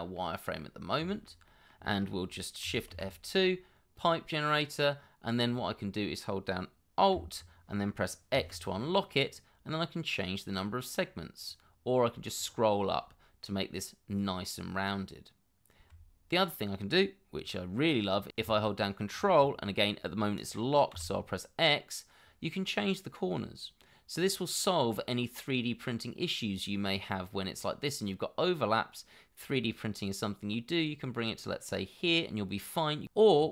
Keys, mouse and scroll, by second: 0.7 scroll down 1, 1.1 shift+middle click, 1.5 middle click, 2.9 shift+2, 8.3 alt+x, 12.1-12.7 alt+scroll up 1, 20.9 ctrl+x.